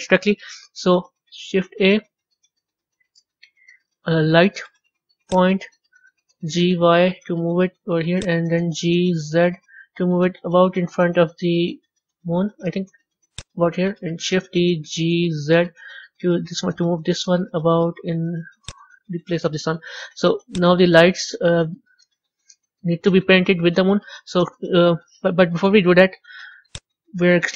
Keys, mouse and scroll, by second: 1.2 shift+a, 6.3 g, 8.7 g, 14.4 shift+d, 20.4 click, 26.6 click.